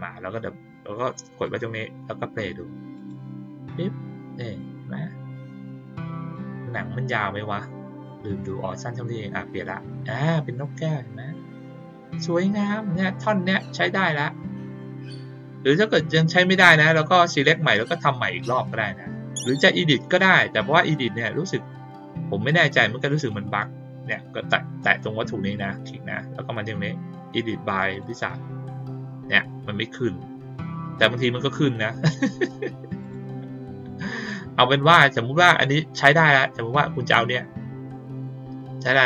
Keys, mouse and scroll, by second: 1.4 click, 2.9 click, 21.1 click, 22.6 click, 23.1 click, 25.4 click, 27.9 click, 30.7 click, 31.9 click, 33.0 click, 33.7 click, 37.1-38.1 drag.